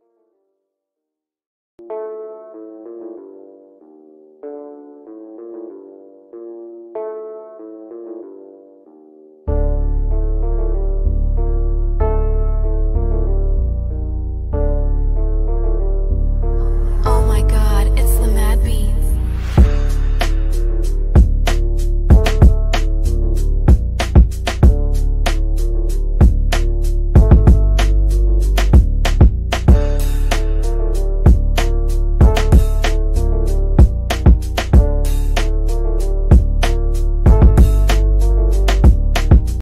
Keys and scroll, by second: 9.9 Escape, 15.8 shift+F2, 16.8 Escape, 18.2 F3, 19.6 shift+F2, 30.7 F9.